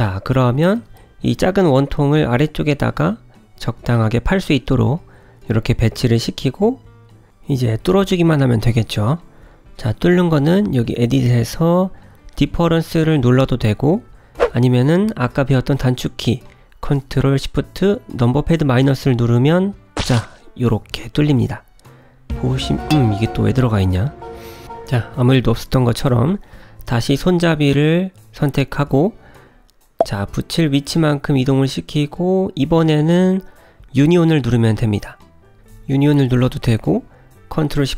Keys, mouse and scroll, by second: 3.7 middle click, 6.1 g, 7.6 middle click, 8.9 n, 10.5 click, 11.9 click, 13.9 shift+click, 14.1 shift+click, 20.0 KP_Subtract, 21.3-21.9 scroll up 4, 21.9 middle click, 25.8 shift+middle click, 26.6 scroll down 1, 27.4 click, 29.0 g, 33.2 click, 33.8 click, 34.5 shift+click, 34.7 shift+click.